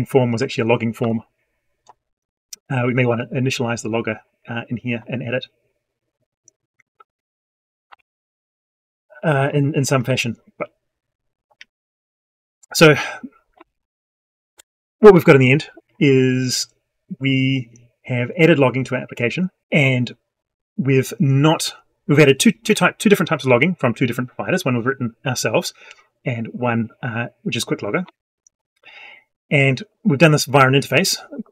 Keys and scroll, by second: 0.8 F12, 7.7 F12.